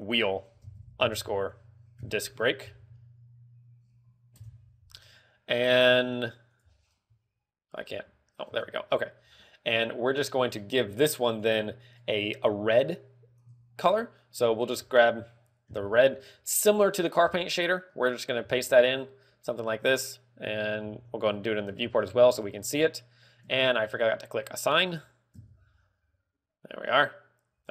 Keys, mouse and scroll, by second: 0.0 click, 6.4 click, 17.0 click, 17.2 click, 18.9 ctrl+v, 21.4 ctrl+v, 22.4 Tab, 24.1 Tab, 25.1 click, 26.2 Tab.